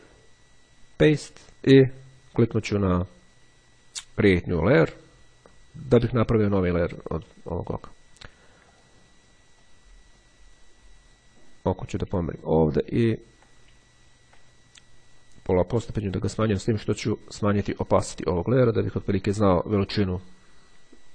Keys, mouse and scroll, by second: 0.6 click, 4.1-5.4 drag, 8.9 click, 9.8-11.7 drag, 12.5-13.6 ctrl+scroll up 2, 14.1-14.6 scroll up 2, 17.9-19.9 drag.